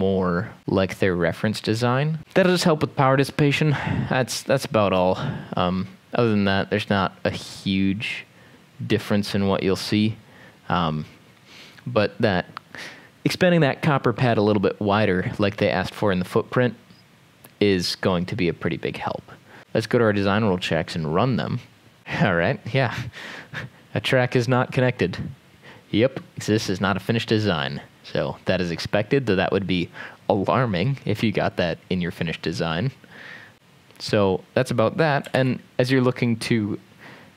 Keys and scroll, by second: 19.6 ctrl+s, 35.4 ctrl+s.